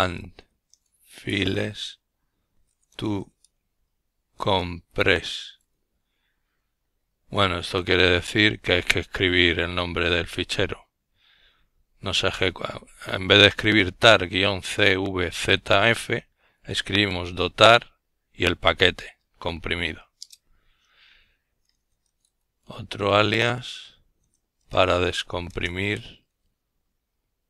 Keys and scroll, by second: 0.0-0.3 typing, 14.4 Return, 16.0-20.4 typing, 23.1 typing, 26.0 typing, 27.0-27.4 typing.